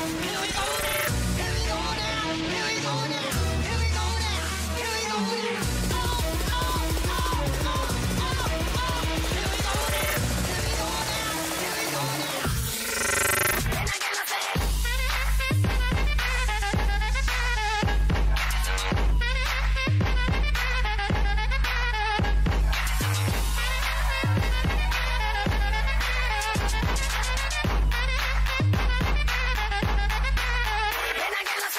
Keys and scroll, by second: 0.3 ctrl+z, 7.4 ctrl+BackSpace, 22.6 ctrl+BackSpace.